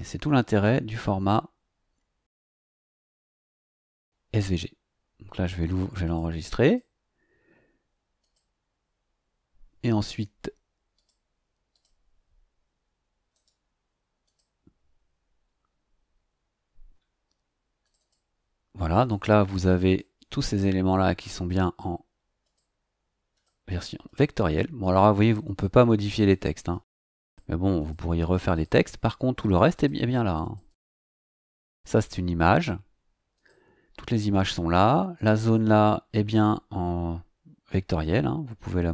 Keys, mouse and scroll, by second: 3.0 click, 6.0 click, 6.6 click, 8.2 click, 10.9 click, 11.7 click, 13.3 right click, 14.2 click, 17.8 click, 18.9 click, 19.8 click, 21.3 click, 22.4 click, 23.3 click, 24.0 click, 24.8 click, 25.4 click, 26.1 click, 26.7 click, 27.2 click, 27.7 click, 28.1 click, 28.7 click, 29.7 click, 30.4 click, 31.4 click, 33.3 click, 34.7 click, 35.1 click, 35.7 click.